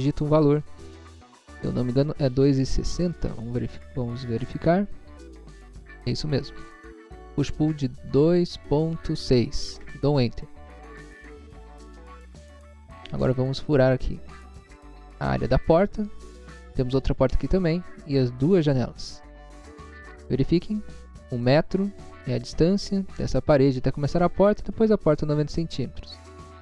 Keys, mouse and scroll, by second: 8.3 2, 9.0 ., 9.7 6, 9.9 Return, 11.8 click, 12.7 middle click, 13.3 middle click, 13.5 scroll up 1, 14.1 scroll down 1, 14.5 middle click, 14.7 middle click, 14.9 scroll up 1.